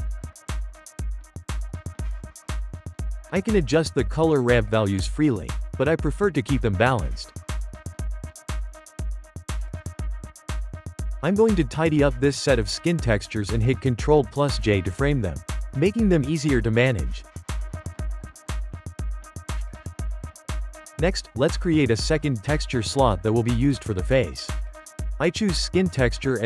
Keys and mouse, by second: 3.3 click, 6.1 ctrl+middle click, 7.0 click, 7.5 f, 7.8 g, 9.1 click, 9.3 g, 9.8-10.5 shift+middle drag, 10.5 click, 10.7 g, 12.4-13.4 shift+middle drag, 13.4 click, 14.9 ctrl+j, 15.6-16.2 shift+middle drag, 16.2 click, 16.7 click, 17.2 g, 19.1 click, 19.3 g, 20.7-21.1 shift+middle drag, 22.9-26.4 drag.